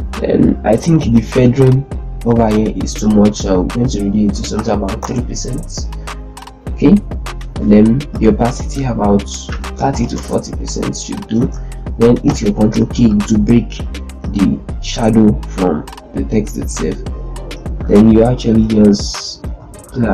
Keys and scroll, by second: 4.5 3, 4.7 Return, 9.0 3, 9.2 BackSpace, 9.6 4, 9.7 0, 9.8 Return, 11.1 ctrl+space, 12.0 ctrl+k, 18.6 Left, 19.5 Left.